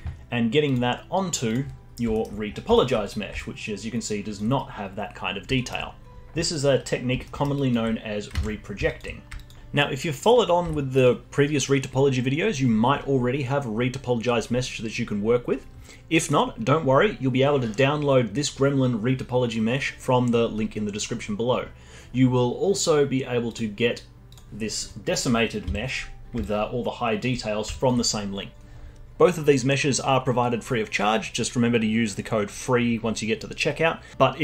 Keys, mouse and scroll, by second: 0.6 click, 1.4 click, 1.8-2.1 scroll up 1, 2.1-2.5 alt+middle drag, 2.5 scroll up 2, 2.7-3.2 alt+middle drag, 3.2 scroll up 1, 3.3-4.4 alt+drag, 4.4-5.5 scroll down 3, 5.5-6.1 alt+middle drag, 6.9-7.2 scroll down 1, 7.2 middle drag, 7.5 click, 8.4 ctrl+z, 8.8 alt+click, 9.1 scroll down 2, 9.3 alt+click, 10.1 middle click, 10.6 z, 16.3 click, 21.4-23.5 scroll up 1, 23.5 click, 24.3 click, 24.7-25.6 scroll up 3, 25.6 z, 26.1 scroll up 4, 26.4-27.3 alt+drag, 27.3-27.7 scroll down 4, 27.7 alt+click, 28.0-28.5 scroll down 2.